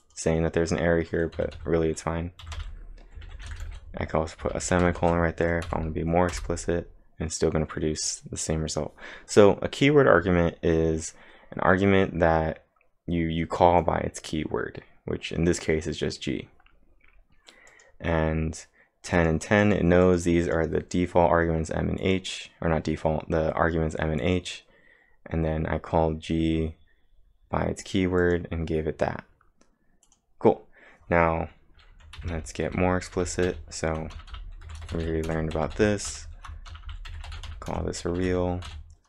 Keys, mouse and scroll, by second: 0.0 click, 0.3-4.1 typing, 5.0 ctrl+`, 5.7 Up, 6.3 Return, 17.7 click, 19.1 click, 19.6 click, 20.0 click, 23.9 click, 24.2 click, 28.2 click, 30.6 click, 31.9-39.0 typing.